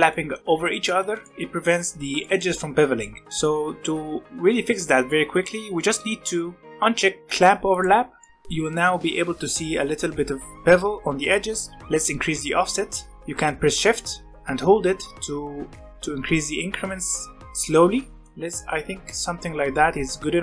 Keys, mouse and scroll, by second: 0.1-2.5 middle drag, 2.5-3.0 scroll up 1, 3.0-6.0 shift+middle drag, 7.7 click, 8.2-10.7 shift+middle drag, 11.9-14.3 shift+drag, 18.2 middle click, 18.4 scroll down 1, 18.6-20.4 middle drag.